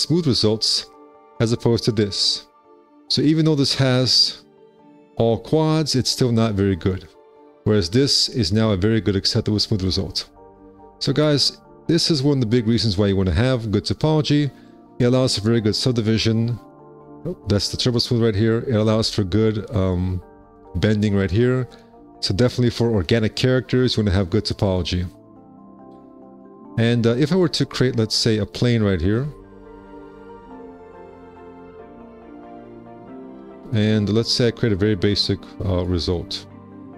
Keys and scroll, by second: 28.4 w, 33.5 2, 34.0 w.